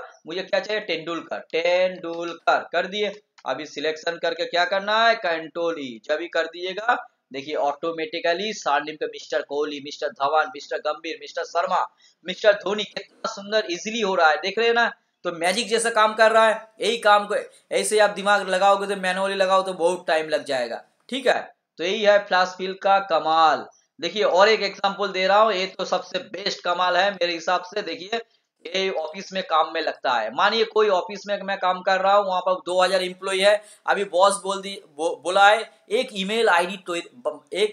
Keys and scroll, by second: 6.5 ctrl+e.